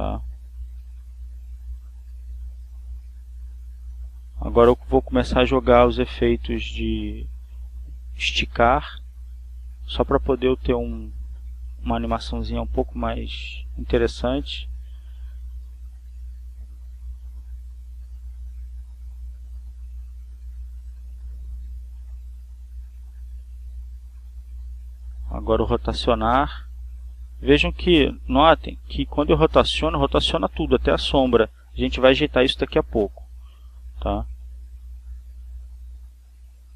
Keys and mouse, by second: 0.5 click, 1.2-2.4 drag, 2.7 click, 3.7 click, 5.6 click, 6.8-7.8 drag, 8.4 Right, 10.9 Down, 13.4 click, 15.5 click, 16.7 click, 17.9 click, 19.3 click, 21.4 Up, 22.9 Left, 25.5 click, 28.2-29.4 drag, 30.2 click, 31.5-33.2 drag, 33.9 click, 34.9 click, 36.5-36.7 drag.